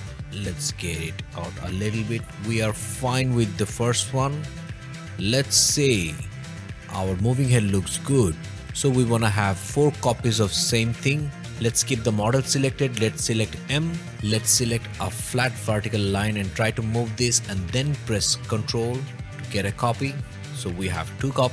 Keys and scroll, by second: 3.3 o, 8.6 h, 11.4 m.